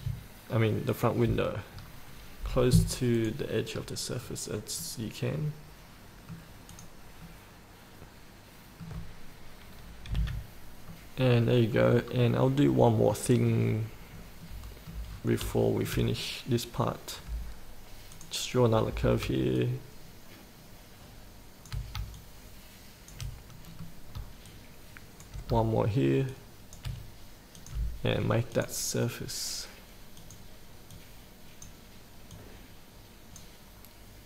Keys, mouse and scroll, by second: 1.1 ctrl+click, 1.9-2.6 scroll up 1, 3.4 click, 3.9 scroll up 1, 5.0-6.6 middle drag, 6.9 click, 7.5-9.6 middle drag, 10.3 F8, 11.1 middle click, 12.3 scroll down 1, 12.9 middle click, 14.0 scroll down 1, 14.6 middle click, 15.3 scroll up 1, 15.8 shift+middle click, 17.4 scroll down 1, 18.3 click, 19.8-21.9 shift+drag, 22.4 shift+click, 23.9 middle click, 24.7 shift+click, 26.5 shift+click, 27.7 click, 32.5-34.2 drag.